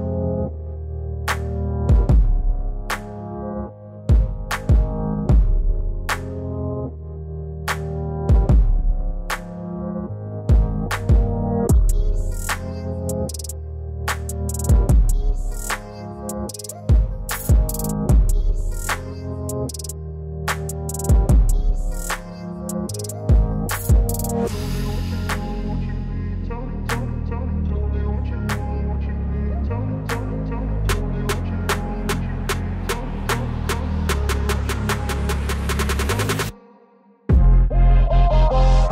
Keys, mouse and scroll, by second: 3.4-4.8 typing, 3.5 click, 9.2 ], 9.3 ], 11.5 click, 12.4 click, 13.7-15.2 typing, 13.8 click, 15.1 click, 17.2 space, 17.2 click, 17.3 space, 17.4 [, 17.5 [, 19.0-20.0 typing, 19.3 click, 25.3 space, 26.1 click, 29.6-31.3 typing, 29.8 click, 30.8 click, 31.3 click, 33.2 space, 33.3 click, 33.4 space, 36.6-38.2 typing, 36.8 click, 37.3 click, 37.7 click, 38.1 click.